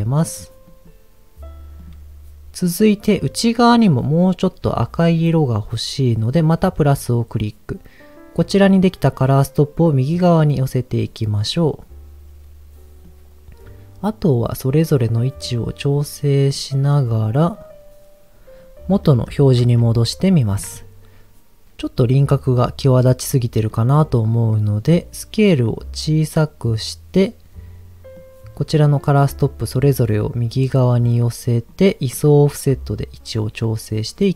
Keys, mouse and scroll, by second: 1.8 click, 6.8 click, 9.0-11.0 drag, 11.5-12.5 scroll up 1, 12.5 scroll up 1, 13.0-14.5 drag, 14.8 click, 15.4-16.5 drag, 17.0-17.9 scroll down 3, 18.5-19.0 scroll down 2, 19.0 middle click, 20.2 ctrl+shift+click, 23.7 middle click, 24.0 scroll up 1, 25.4-27.2 drag, 28.1 click, 28.8 click, 29.4 click, 30.2 click, 31.0 click, 32.4-34.3 shift+drag.